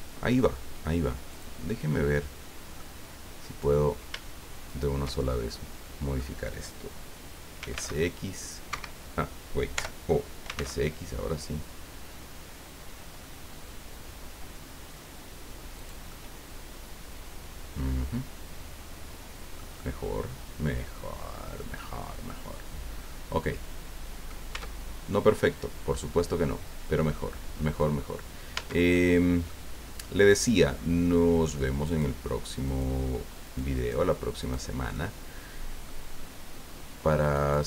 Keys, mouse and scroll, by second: 0.6-1.3 scroll up 1, 1.3 click, 1.9-2.9 middle drag, 3.6 right click, 4.7 shift+right click, 5.1-6.3 shift+middle drag, 7.6 s, 7.7 x, 8.7 Escape, 9.7 o, 10.4 s, 10.5 x, 11.4 scroll down 2, 12.0-12.3 scroll down 2, 14.4 scroll up 2, 15.7 click, 21.7-24.4 middle drag, 24.5 Tab, 24.8 scroll down 1, 25.1-28.0 drag, 28.5 Tab, 28.9 click, 29.7 scroll up 2, 31.8 right click, 32.7 right click, 33.4 right click, 34.4 right click, 34.9-36.0 middle drag, 36.1 scroll up 2, 37.3 right click.